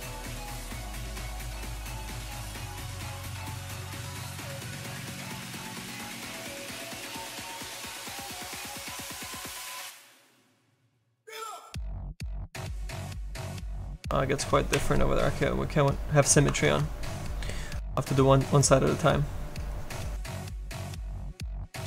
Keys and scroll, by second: 1.7 s, 12.4 ctrl+z, 13.3 ctrl+z, 13.4 ctrl+z, 13.6 ctrl+z.